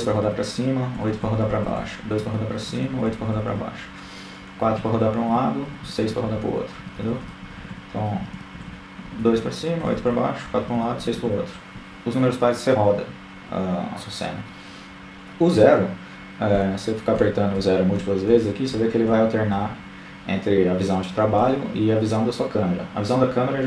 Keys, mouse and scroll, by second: 0.0-1.7 typing, 2.8-9.2 typing, 14.4-17.4 typing, 19.4 KP_0.